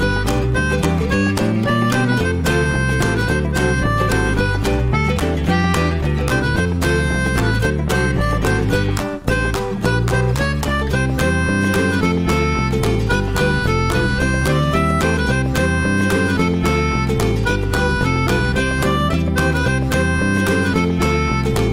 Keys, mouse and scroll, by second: 0.6-0.9 scroll up 2, 0.9-4.0 shift+middle drag, 9.8-13.4 middle drag, 13.4 scroll down 1, 13.6-15.0 shift+middle drag, 15.3 Tab, 15.6 click, 15.9-16.2 scroll down 1, 16.2 middle click, 16.5 Tab, 16.9 click, 17.2 click, 17.9-18.5 middle drag, 18.5 click, 19.7-21.3 middle drag, 21.3 s.